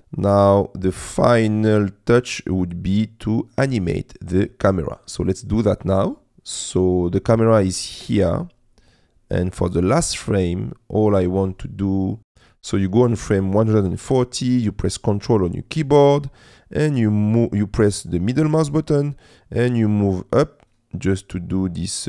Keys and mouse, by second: 0.0 space, 3.6 space, 8.9 click, 12.2 click, 18.6-20.5 ctrl+middle drag.